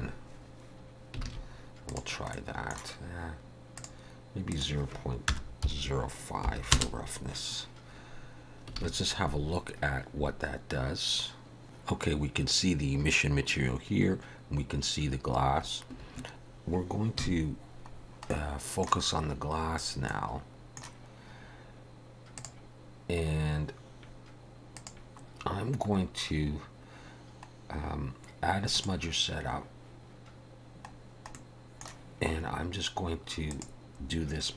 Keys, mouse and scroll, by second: 1.3 alt+a, 1.9 click, 2.4 middle click, 3.8 click, 8.9 alt+a, 15.9 click, 15.9 KP_0, 17.2 KP_Decimal, 18.0 scroll down 3, 18.3 middle click, 19.1-19.4 scroll up 2, 20.1 middle click, 22.4 click, 24.8 click, 25.4-26.0 scroll down 5, 26.6 scroll down 2, 27.6 scroll down 1, 28.7 click, 31.0 scroll down 1, 31.3 middle click, 33.5 click, 34.1 scroll down 3.